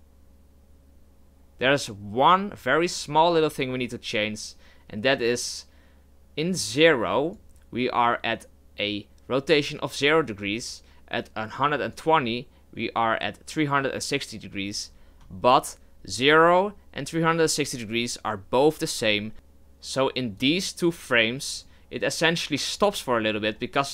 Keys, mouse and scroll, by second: 1.2-23.9 drag.